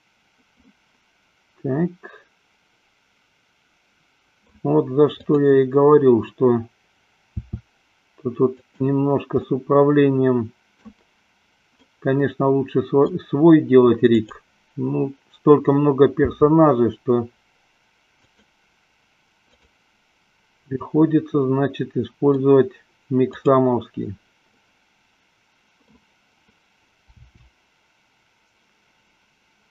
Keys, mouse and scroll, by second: 7.3 r, 9.8-11.3 middle drag, 12.1-13.6 middle drag, 14.4 click, 16.6 r, 19.7 click, 21.2-22.8 middle drag, 23.7 click, 24.9-26.3 middle drag, 27.6 r.